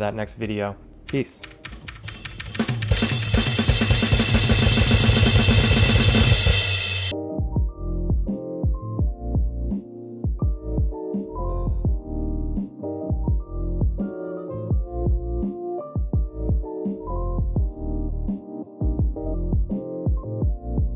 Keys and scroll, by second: 0.8 ctrl+alt+shift+super++.